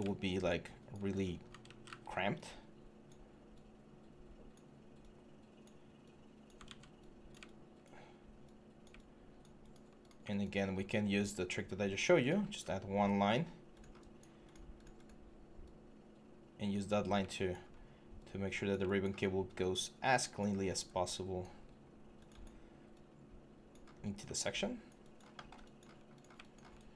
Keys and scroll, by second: 1.4 ctrl+d, 1.7 w, 6.5 ctrl+z, 12.3 w, 16.7 3, 21.4 1, 23.7 3.